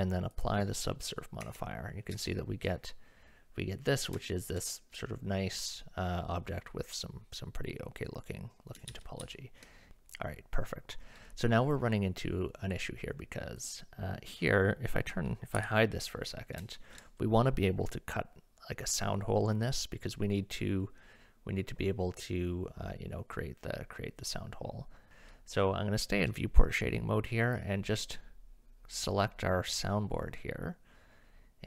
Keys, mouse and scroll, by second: 1.4 Tab, 2.3 shift+middle click, 4.3 shift+middle click, 8.9 ctrl+z, 9.2 ctrl+z, 9.9 Tab, 13.6 click, 15.6 h, 16.8 shift+middle drag, 24.2 middle drag, 28.0 click.